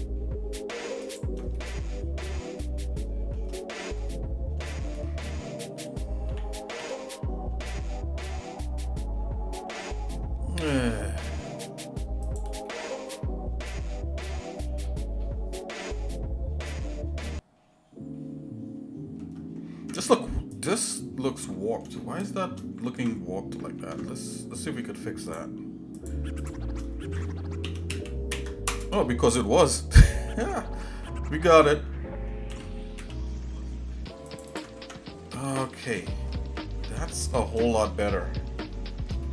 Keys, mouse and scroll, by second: 1.6-3.4 shift+middle drag, 4.0-4.5 scroll up 2, 4.7 shift+middle click, 6.3 g, 12.7 middle click, 12.7 scroll down 1, 13.2-19.2 shift+middle drag, 19.9 Tab, 20.5 click, 20.8 Tab, 21.5 middle click, 22.0 shift+middle click, 23.8 ctrl+Tab, 26.0 click, 26.4 shift+click, 27.6 s, 30.2 shift+middle click, 31.1 shift+middle click, 32.5 g, 34.5 ctrl+click, 34.8 Tab, 35.6-36.1 scroll down 2, 35.9 scroll up 1, 36.1 scroll down 1, 36.3 middle click, 36.9 shift+middle click, 38.6 middle click, 39.2-39.3 shift+middle drag.